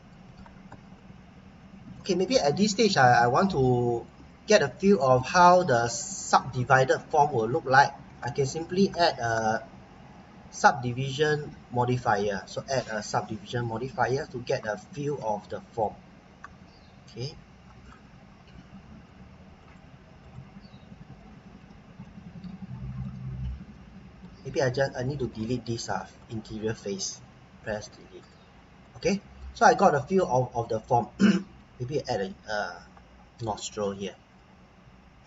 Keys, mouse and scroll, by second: 0.8-1.2 scroll down 1, 1.2-1.8 scroll up 1, 1.9 middle click, 3.2 scroll down 1, 3.5 middle click, 4.3 scroll up 1, 4.7 middle click, 5.5-7.1 scroll up 1, 7.1-7.5 scroll down 1, 7.5 middle click, 12.0 click, 15.5 scroll down 1, 15.8-16.7 scroll up 1, 17.6-18.1 scroll down 1, 19.6 click, 21.2 middle click, 22.0 middle click, 23.2-23.7 scroll up 1, 23.7 middle click, 24.4-24.8 scroll up 1, 24.9 middle click, 26.2 click, 27.6 Delete, 28.2 click, 28.8 middle click, 29.6-30.0 scroll down 1, 30.0 middle click, 30.9-31.2 scroll up 1, 31.2 middle click, 31.9-34.1 scroll up 1.